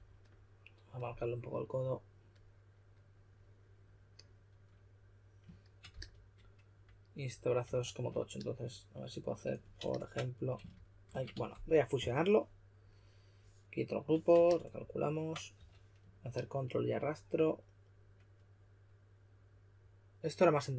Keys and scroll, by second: 5.9 s, 7.4-8.1 typing, 9.7 super+a, 10.4-11.8 typing, 15.5 w.